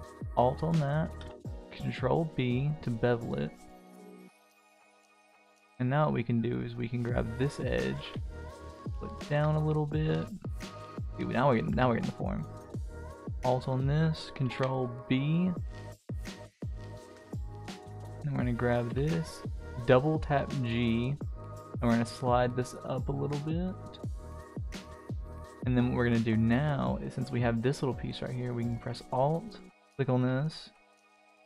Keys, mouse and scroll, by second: 1.2 ctrl+b, 6.7 click, 7.4 alt+click, 7.9 g, 9.3 Tab, 9.5-10.5 middle drag, 10.9-11.6 middle drag, 11.7 Tab, 12.6 alt+click, 14.5 ctrl+b, 18.9 g, 24.4 click, 25.6 click, 25.9 click, 26.2 click, 27.9 middle click, 29.5 alt+click.